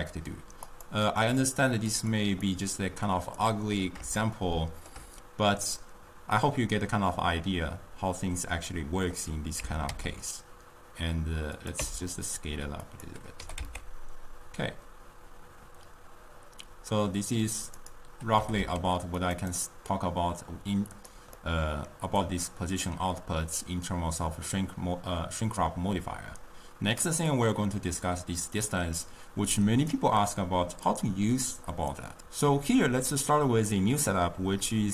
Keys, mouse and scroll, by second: 2.5-4.3 drag, 4.3-7.5 shift+middle drag, 9.2 click, 9.7 Tab, 9.9 s, 11.9 Tab, 13.0 click, 13.5 g, 18.5 g, 19.5-21.0 right drag, 21.0 click, 21.5-22.5 middle drag, 22.5-25.4 drag, 27.5-30.6 drag, 30.9-32.2 drag.